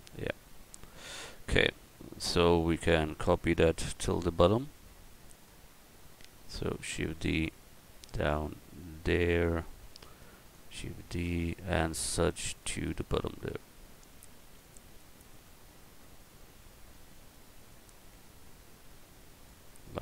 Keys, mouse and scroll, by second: 6.5 shift+d, 7.6-9.4 drag, 9.9 shift+d, 10.5-12.3 drag, 12.3 shift+d, 12.8-14.5 drag, 14.4 shift+d, 15.1-16.9 drag, 16.9 shift+d, 17.7-19.4 drag.